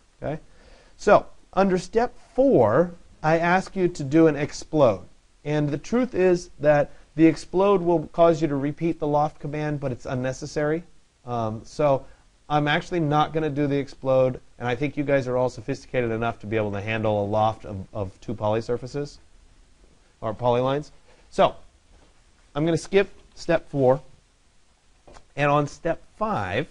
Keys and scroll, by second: 22.8 Escape.